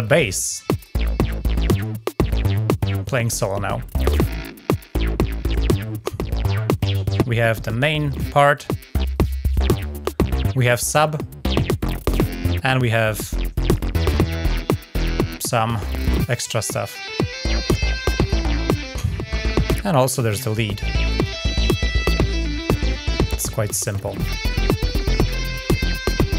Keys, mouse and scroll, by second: 0.0-0.3 ctrl+scroll down 2, 0.5 click, 0.7 ctrl+click, 0.9 scroll down 2, 2.1 scroll up 2, 4.0-4.9 middle drag, 5.8-6.1 ctrl+scroll up 2, 8.9 click, 9.5 click, 10.9 click, 11.9 click, 13.4 click, 13.8 click, 16.2 click, 16.6 click, 18.0 click, 19.9 click, 20.8 click, 25.4 middle click.